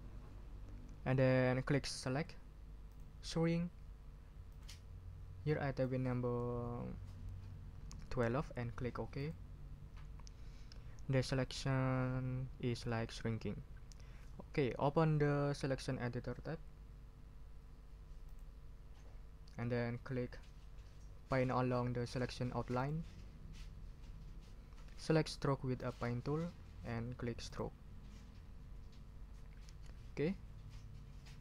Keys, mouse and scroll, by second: 2.9 click, 4.5 click, 5.4 click, 7.8-8.7 typing, 9.2 click, 18.2 click, 22.7 click, 25.7 click, 27.4 click.